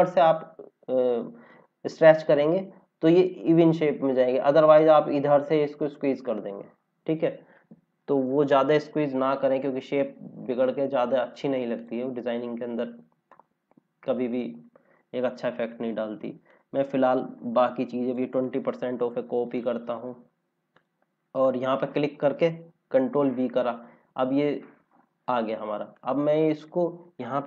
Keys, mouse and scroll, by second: 8.1 ctrl+z, 8.9 scroll down 1, 10.6 click, 12.0 scroll down 1, 13.5 scroll down 1, 16.4 click, 18.9 ctrl+c, 22.7 ctrl+v, 23.8 scroll up 1, 25.9 click.